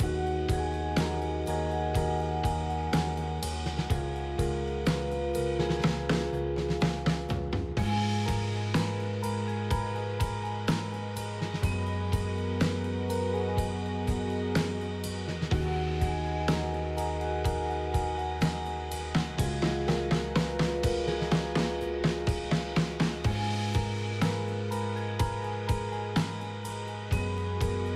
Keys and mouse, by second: 3.2 middle click, 6.4 middle click, 9.4 middle click, 13.8 middle click, 15.6 click, 16.1 middle click, 18.1 KP_3, 20.8 e, 22.9 s, 24.4 s, 25.4 middle click.